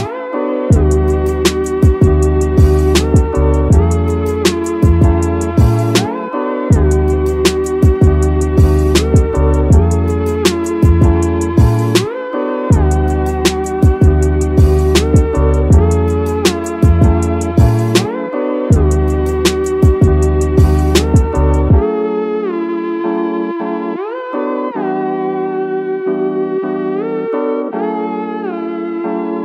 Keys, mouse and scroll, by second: 1.3 y, 3.7 click, 4.7 KP_3, 6.2 ctrl+KP_1, 6.9 scroll down 1, 6.9 scroll up 2, 7.2 shift+middle click, 7.6 scroll up 1, 7.9 shift+middle drag, 8.8 right click, 10.7 click, 12.0 ctrl+z, 12.0 right click, 12.3 click, 12.7-13.1 middle drag, 13.1 scroll up 1, 13.3-13.9 scroll down 2, 14.0 click, 14.3-15.9 right drag, 16.4 middle click, 17.0 KP_1, 18.2 ctrl+KP_1, 18.9-19.3 scroll up 2, 20.2 s, 21.9 right click, 22.8-23.3 scroll down 2, 23.5 Tab, 25.5 click, 26.7 click, 27.4 click, 29.2 g.